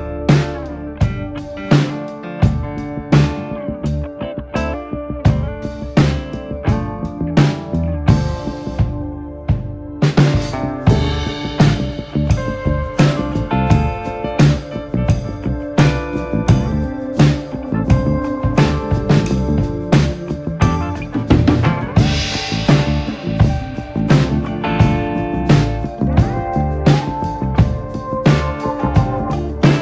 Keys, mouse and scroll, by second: 1.3 click, 1.7 click, 2.3 alt+/, 2.4 click, 2.7 shift+click, 2.9 m, 3.2 click, 3.5 shift+click, 3.7 m, 5.5 KP_7, 5.9 KP_9, 6.4 click, 6.7 shift+click, 7.0 m, 7.3 shift+click, 7.7 ,, 8.0 ,, 8.6 m, 9.2 click, 9.4 scroll down 1, 9.6 middle click, 10.1-12.0 typing, 12.3 scroll up 2, 12.7 shift+middle click, 13.2 scroll down 1, 13.4 shift+middle click, 14.1 click, 14.2 alt+/, 14.4 click, 14.7 alt+/, 15.0 alt+/, 15.4 click, 16.3 ctrl+z, 16.7-17.7 drag, 17.9 Delete, 18.9 g, 20.4 m, 21.0 click, 22.3 alt+/, 22.5 click, 23.2-23.5 scroll down 3, 23.5 scroll up 1, 23.7-24.7 middle drag, 25.0 ctrl+r, 27.4 KP_7, 27.9 scroll up 1, 28.1 shift+middle click, 28.8 click, 29.1 middle click, 29.5 click.